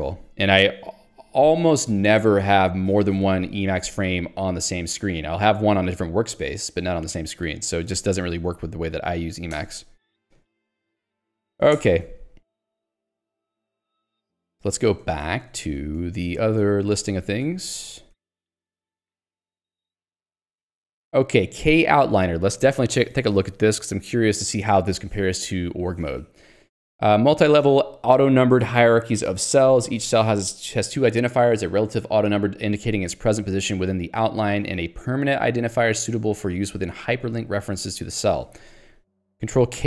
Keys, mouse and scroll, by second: 8.0 Escape, 8.4 ctrl+g, 10.8 ctrl+g, 11.4 ctrl+alt+j, 11.9 Return, 12.1 Escape, 14.2 ctrl+d, 21.1 k, 21.6 j, 23.8 k, 39.1 Escape.